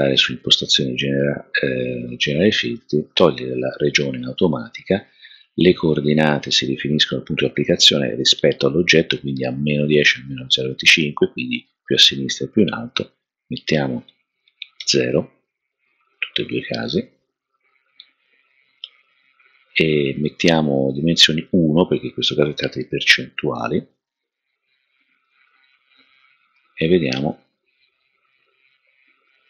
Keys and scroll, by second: 14.8 0, 18.5 0, 20.5 0, 21.9-22.6 typing, 24.4-25.1 typing, 28.2 typing.